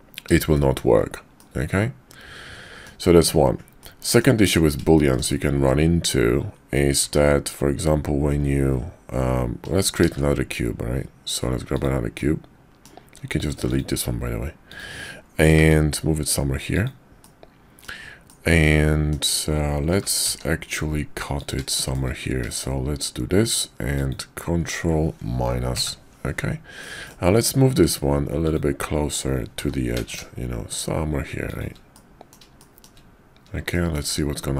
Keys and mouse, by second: 0.5 shift+drag, 1.3-2.9 middle drag, 3.8-4.2 middle drag, 4.9 shift+middle drag, 5.6-6.1 middle drag, 7.0 `, 10.0 shift+a, 12.2-12.9 drag, 13.6 x, 14.7 click, 15.6 g, 17.2-17.9 drag, 18.2-19.1 drag, 19.9 g, 21.7 shift+drag, 23.9 shift+click, 25.7 ctrl+KP_Subtract, 26.8-27.1 drag, 28.4 click, 29.5 g, 31.9-32.3 drag, 32.6 shift+drag, 33.7 shift+click.